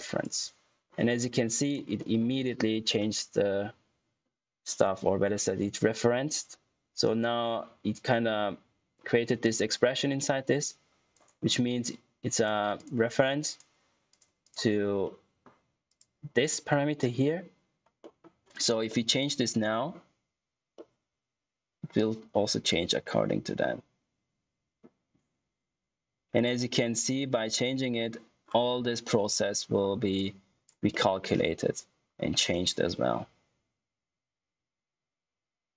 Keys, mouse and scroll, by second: 0.0 click, 1.9 middle click, 7.0 click, 9.7 click, 15.0 middle click, 15.8 click, 17.9 middle click, 28.3-29.5 scroll down 1, 29.7 scroll up 1, 30.1 click, 30.8 middle click.